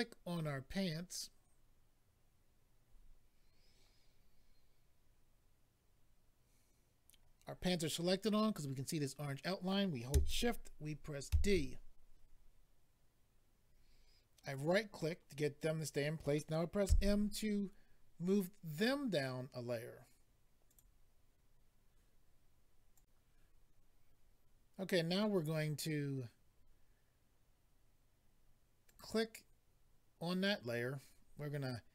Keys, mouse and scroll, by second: 14.4 right click, 14.5 right click, 18.2 m, 18.7 click, 18.8 click, 20.6 click, 20.8 click, 22.9 click, 24.2 click, 28.8 click, 28.9 click.